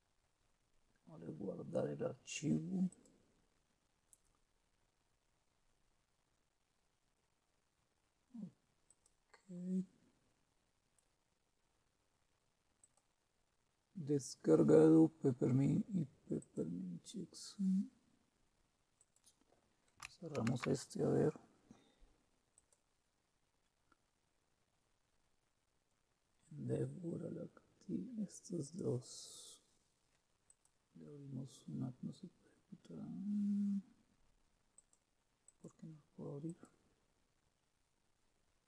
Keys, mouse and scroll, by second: 2.9 click, 8.8 click, 12.8 click, 16.4 click, 19.0 click, 20.3 super+q, 20.3 click, 22.5 click, 28.6-29.7 right drag, 30.5 click, 34.8 click, 35.4 click, 36.5 click, 38.1-38.6 drag.